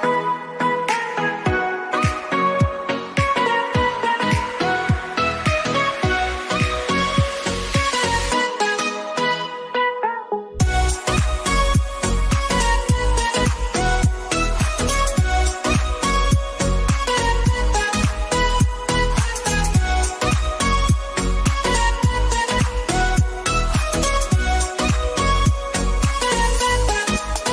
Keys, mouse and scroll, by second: 0.3 alt+scroll down 1, 1.2-1.7 alt+scroll down 1, 1.7-3.1 alt+drag, 3.1-3.5 alt+scroll up 1, 4.2-6.2 drag, 6.2 alt+scroll up 1, 6.5 click, 7.3 alt+scroll up 1, 7.5-9.3 drag, 9.3 alt+scroll down 1, 10.6 click, 10.9 alt+scroll down 1, 12.4 click, 14.1 ctrl+Num_Lock, 14.1 alt+scroll up 1, 16.1 click, 20.5 click, 21.5 shift+click, 24.0 ctrl+a, 25.5 Caps_Lock, 25.7-27.5 typing.